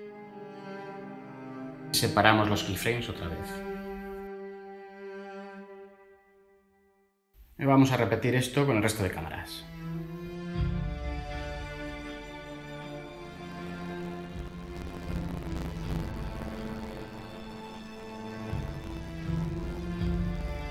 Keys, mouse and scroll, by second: 14.2 7, 14.4 Return, 15.7 9, 16.0 Return.